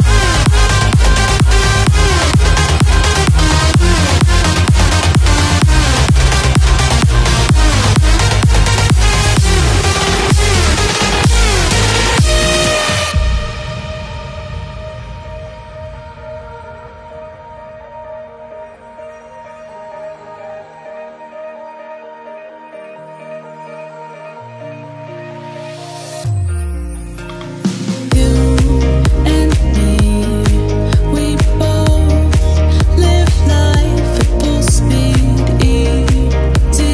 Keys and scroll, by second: 24.0 ctrl+j.